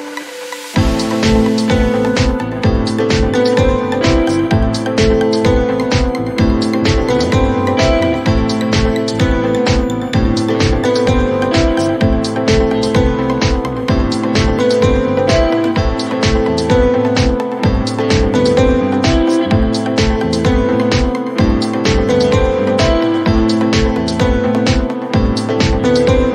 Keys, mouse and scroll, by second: 1.0 click.